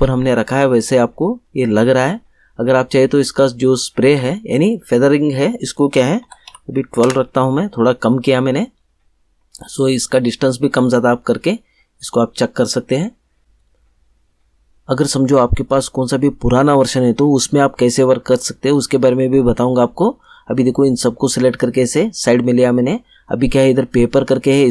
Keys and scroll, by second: 5.9-6.9 typing, 7.0 Return.